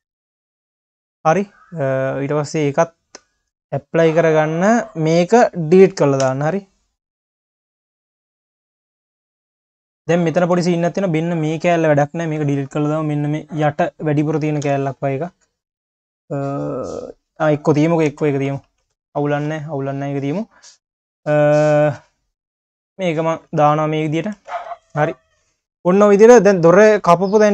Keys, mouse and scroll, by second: 1.0 drag, 1.5 click, 3.0-5.1 drag, 6.3 Delete, 7.9 click, 8.5 scroll up 1, 8.7 q, 9.4-10.1 scroll up 1, 10.1 click, 10.3 Tab, 10.6 q, 11.0-11.7 scroll up 4, 11.7 q, 12.4 scroll down 1, 12.7 3, 13.2 click, 13.7-14.6 scroll down 1, 14.6 Delete, 18.1 Tab, 18.4 click, 18.7 ctrl+s, 18.9 q, 20.6-21.8 scroll down 1, 22.1 click, 22.7 ctrl+s, 22.9-23.3 scroll down 4, 23.3 click, 23.7 ctrl+s, 23.8-24.4 scroll down 1, 24.4 ctrl+s, 24.6 scroll down 1, 24.7 q, 25.6 scroll down 2, 26.0 q, 27.1 q.